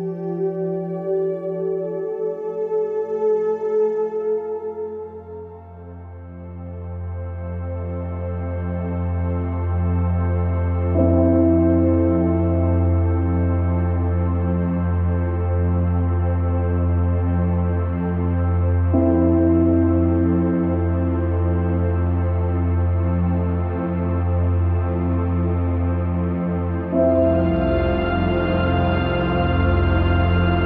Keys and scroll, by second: 3.6 ctrl+z, 12.3 ctrl+z, 13.7 ctrl+alt+z, 17.3 ctrl+z, 24.8 ctrl+z.